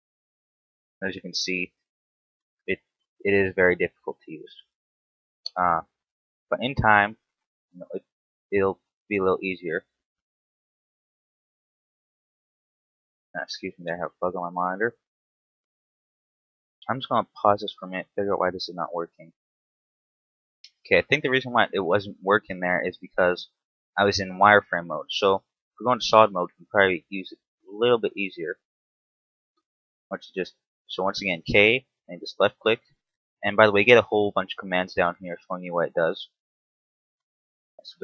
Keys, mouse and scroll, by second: 0.8 ctrl+z, 1.7 k, 10.6 middle click, 11.8-12.2 scroll up 1, 12.5 shift+middle click, 15.1 right click, 16.1 ctrl+z, 21.1 scroll down 2, 21.8 middle click, 22.4-22.9 scroll up 3, 22.9-25.3 typing, 23.9 scroll down 1, 28.2 right click, 28.5 ctrl+z, 30.1 k, 32.3 middle click, 37.8 middle click.